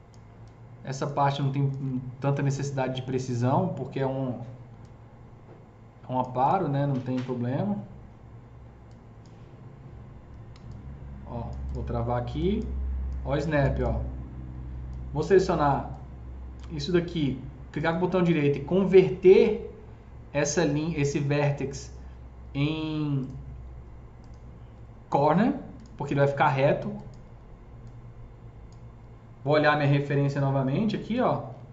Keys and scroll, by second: 10.4 s.